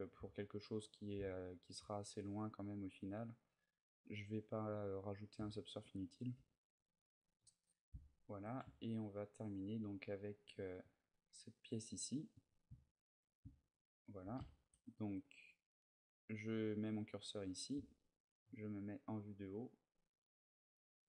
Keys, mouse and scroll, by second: 0.2 middle click, 1.0 ctrl+middle click, 2.1-4.6 ctrl+middle click, 4.6 middle click, 5.3 shift+middle click, 5.7 middle click, 6.1 a, 7.2 KP_3, 7.9 shift+middle click, 8.5 ctrl+middle click, 9.0 ctrl+middle click, 9.9 ctrl+middle click, 12.1 click, 12.6 shift+middle click, 13.3 ctrl+middle click, 14.1 ctrl+middle click, 14.5 shift+middle click, 15.6 click, 18.2 KP_7.